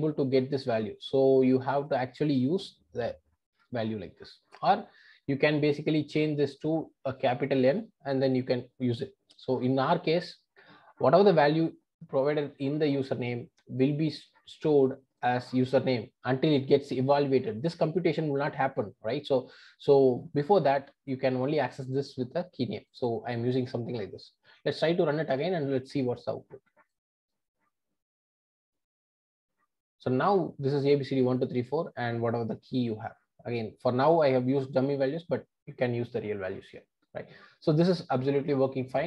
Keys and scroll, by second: 25.4 ctrl+r.